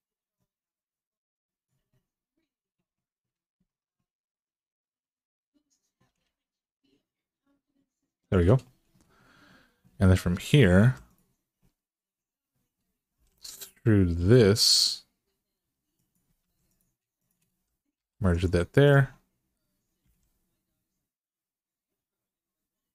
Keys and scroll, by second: 5.9 g, 10.6 2, 14.0 e, 16.2 1, 17.7 m, 19.8 g.